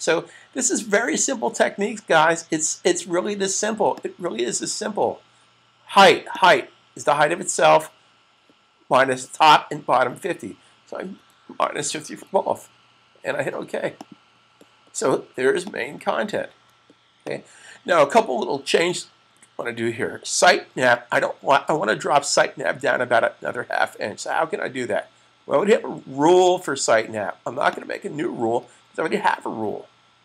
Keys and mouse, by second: 3.8 click, 10.8-11.7 typing, 13.6 click, 16.2 super+s, 17.0 click, 27.6 click.